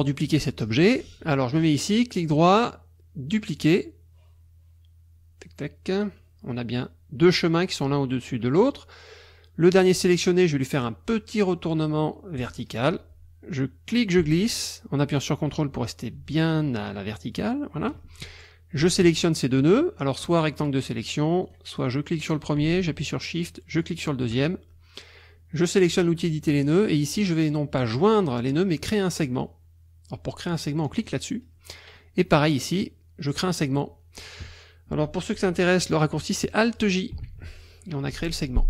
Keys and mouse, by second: 1.6 click, 5.9 click, 12.4 click, 14.0-18.0 ctrl+drag, 20.2 click, 21.4 click, 22.3 click, 23.8 shift+click, 25.6 click, 26.5 click, 31.1 click, 32.0 click, 37.3 alt+j.